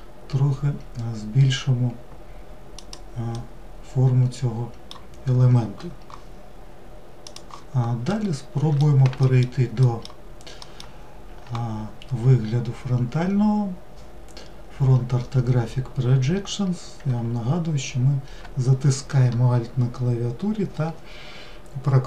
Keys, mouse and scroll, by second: 3.0-6.2 middle drag, 8.0-9.1 middle drag, 9.6 alt+middle click, 10.4 alt+middle drag.